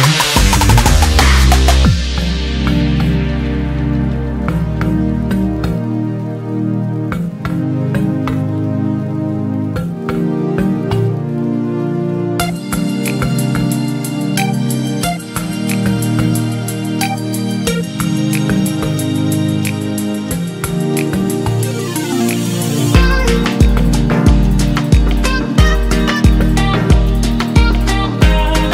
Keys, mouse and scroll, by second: 6.4 r, 14.8 middle click, 15.2 middle click, 15.8 middle click.